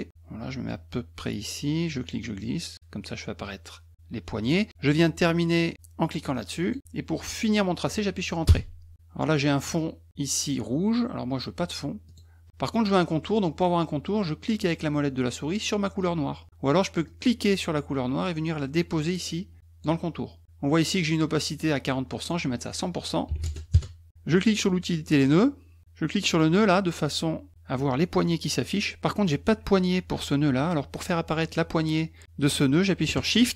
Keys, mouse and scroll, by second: 1.8-4.4 drag, 6.6 click, 8.5 Return, 12.1 click, 17.1-19.8 drag, 22.1 click, 25.1 click, 26.3 click.